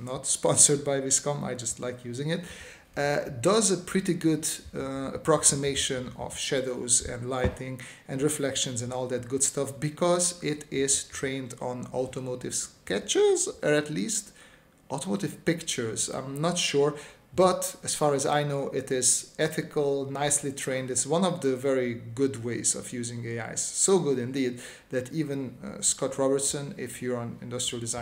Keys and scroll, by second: 1.0 space, 2.6 space, 3.3 s, 5.9 space, 6.9 s, 7.4 space, 8.4 space, 12.0 s, 13.2 space, 19.2 space, 23.3 space, 26.0 space, 27.5 space.